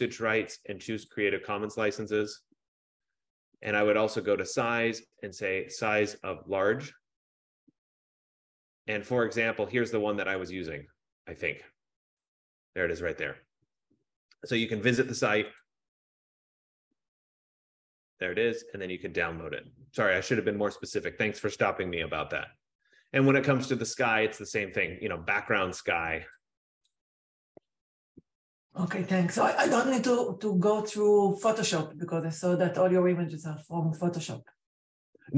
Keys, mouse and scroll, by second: 1.4 click, 4.0 click, 8.1 F15, 10.6 click, 16.2 click, 17.6-20.8 drag, 24.7 click, 25.5-26.0 scroll down 3, 27.3 click, 27.5-30.0 typing, 28.7 scroll, 31.4 click.